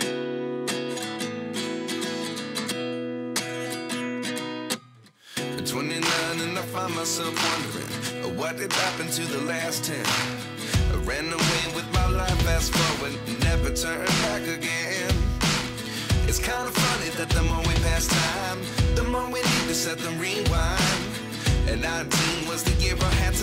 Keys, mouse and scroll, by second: 1.5 click, 2.3 click, 4.0 s, 10.0 click, 10.4-11.0 scroll up 1, 11.3 click, 12.4 click, 14.5-20.0 drag, 21.4 click, 21.9 click, 22.3 click.